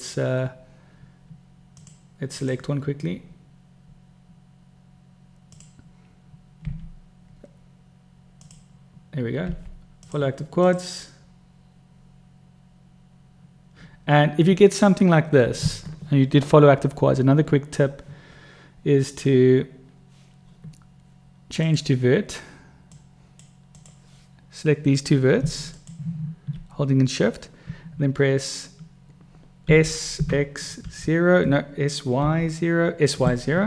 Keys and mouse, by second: 5.8 click, 7.0 u, 8.6 click, 9.8 u, 23.3-23.7 drag, 26.0 shift+click, 30.0 s.